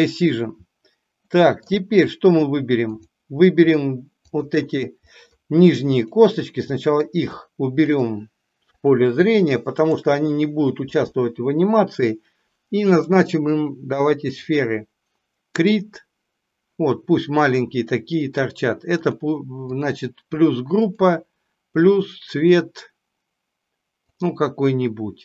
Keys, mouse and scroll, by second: 1.3 middle click, 2.9 click, 4.1 shift+click, 5.0 middle drag, 6.6 middle click, 7.9 shift+drag, 8.6-9.0 shift+drag, 9.8 shift+click, 12.9-14.4 drag, 15.8 click, 18.9 click, 19.6 click, 20.8-24.3 drag.